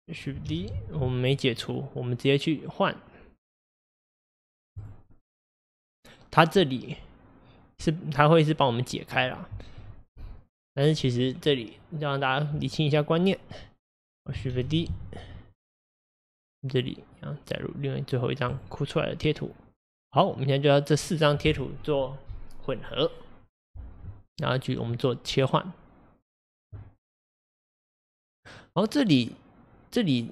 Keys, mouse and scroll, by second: 0.1 click, 0.4 shift+d, 2.4-3.9 drag, 4.0-4.4 drag, 5.4 click, 14.1 click, 14.5 shift+d, 17.7-30.3 drag.